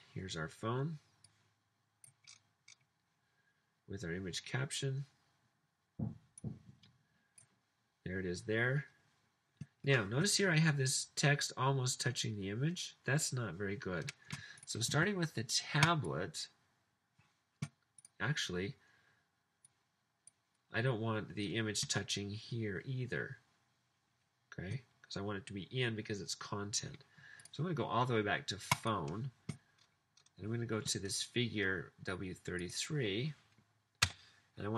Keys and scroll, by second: 34.2 Return.